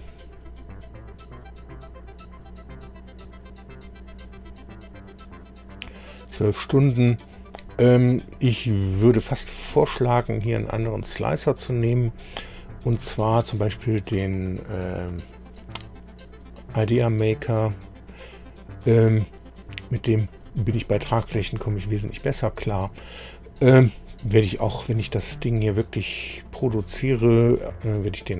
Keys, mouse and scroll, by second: 7.3-7.6 scroll down 1, 8.6-14.3 right drag, 20.3-23.5 right drag, 23.9-28.3 right drag.